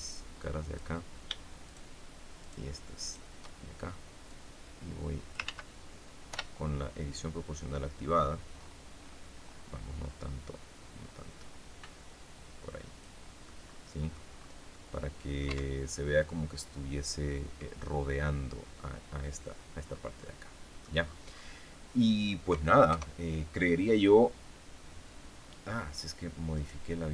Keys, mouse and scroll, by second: 1.6 shift+right click, 2.3 shift+right click, 2.9 shift+right click, 4.2-5.4 drag, 5.4 ctrl+z, 6.2 o, 7.3 click, 8.0-9.6 scroll up 4, 9.9 scroll up 1, 10.5-11.1 scroll up 1, 11.3-11.6 scroll down 1, 13.4 click, 14.2-14.6 scroll down 1, 14.6 click, 15.4 Tab, 15.8-17.6 middle drag, 19.8 scroll down 1, 20.1 middle click, 20.9-21.5 scroll down 1, 21.5-22.8 scroll down 1, 22.8 KP_0, 26.4 right click.